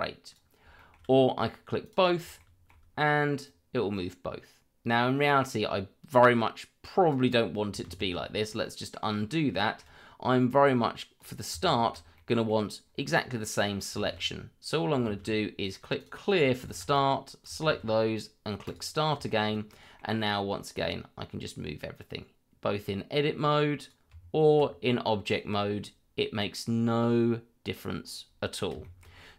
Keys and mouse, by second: 0.7 shift+middle click, 1.8 click, 2.4 shift+middle drag, 3.4-7.1 drag, 7.8 ctrl+z, 8.6-8.9 middle drag, 9.6 shift+middle click, 11.2 click, 12.1 middle click, 13.4 middle click, 14.0 shift+z, 16.0 click, 16.9 click, 18.6 click, 19.2 shift+middle drag, 19.7 middle drag, 20.9-23.9 drag, 25.2-28.0 drag, 28.8 shift+middle drag.